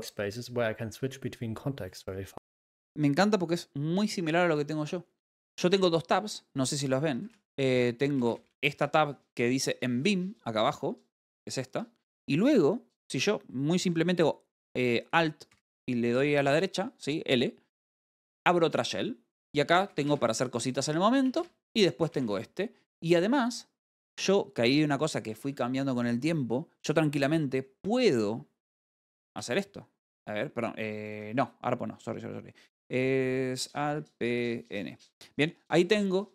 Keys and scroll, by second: 5.3-6.4 typing, 11.6 Return, 16.0 l, 19.9-20.7 typing, 24.6 k, 29.8 n, 31.3-32.0 typing, 34.3 p, 35.3 n.